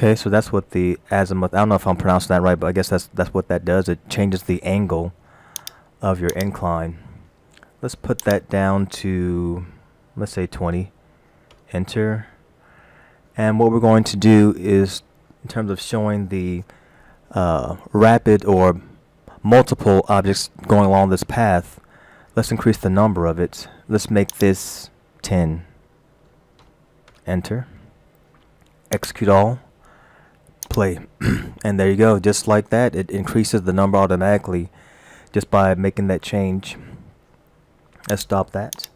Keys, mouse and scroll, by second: 5.6 click, 6.3 click, 8.2 click, 24.4 click, 29.0 click, 30.7 click, 38.2 click, 38.8 click.